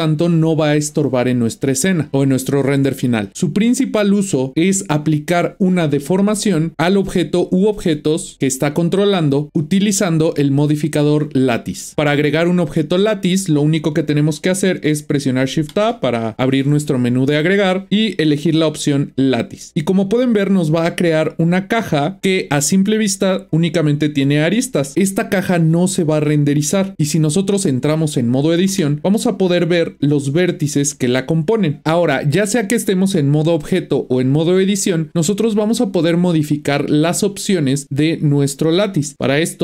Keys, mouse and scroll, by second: 11.9 click, 15.5 shift+a, 20.7-22.2 middle drag, 24.5-25.5 scroll down 1, 25.5-26.9 middle drag, 26.9 Tab, 28.7 Tab, 30.0 click, 30.9 click, 31.4 click.